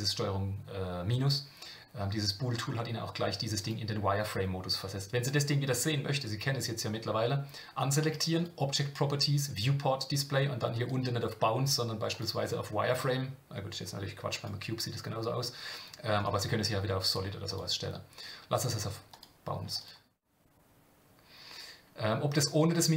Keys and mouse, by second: 8.3 click, 10.7-12.2 drag, 14.3-16.2 drag, 17.5-19.2 drag.